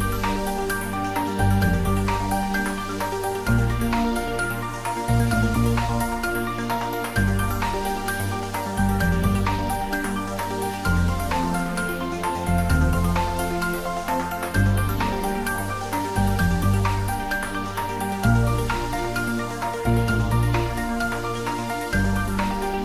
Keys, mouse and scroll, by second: 0.3 click, 0.9 s, 2.2 click, 3.1 e, 3.9 click, 4.4 ctrl+z, 5.3 g, 6.5 z, 7.9 click, 8.3 scroll down 1, 8.9-10.4 middle drag, 11.7 click, 12.2 g, 12.6 z, 14.8 click, 15.2-15.6 scroll up 1, 16.5 Tab, 17.0-17.5 scroll down 1, 18.0-21.6 middle drag, 21.6-22.0 scroll up 1.